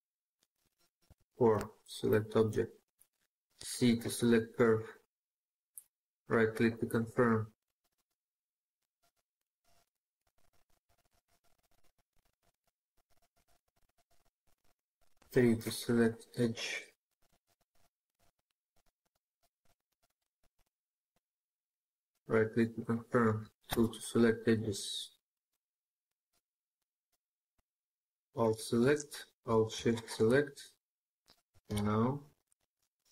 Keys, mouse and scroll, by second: 0.8 4, 5.4-6.1 typing, 5.7 right click, 9.1 scroll down 1, 9.3-10.7 scroll up 1, 12.0-12.6 scroll down 1, 12.6-12.9 scroll up 1, 12.9 middle click, 15.0 typing, 21.5 right click, 22.4 scroll down 1, 22.4 scroll up 1, 22.5 scroll down 1, 22.5-22.8 scroll up 1, 22.8 scroll down 1, 22.9-23.2 scroll up 1, 23.3 scroll down 1, 23.4 scroll up 1, 23.5 2, 24.2-24.7 scroll up 1, 26.8 2, 26.9 alt+click, 29.7 alt+shift+click, 31.5 ctrl+z.